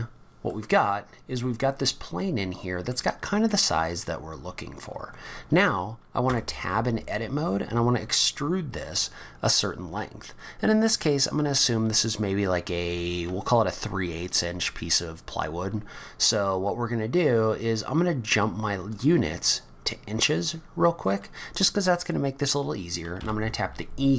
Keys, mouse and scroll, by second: 0.5 middle click, 3.5-3.9 scroll down 3, 3.9-5.3 scroll up 3, 6.2 Tab, 18.9 click, 23.2 e.